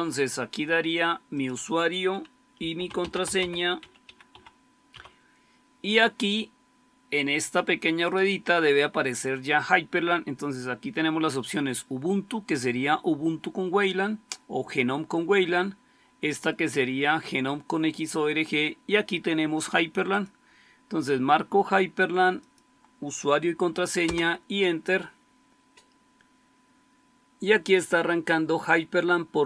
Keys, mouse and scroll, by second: 2.2-4.8 typing, 23.9 Return.